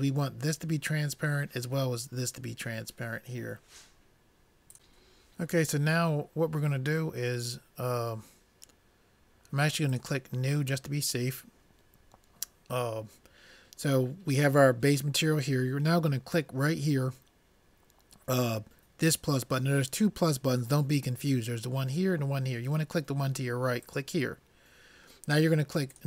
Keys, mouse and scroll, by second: 10.0-11.8 drag, 24.0-26.0 drag.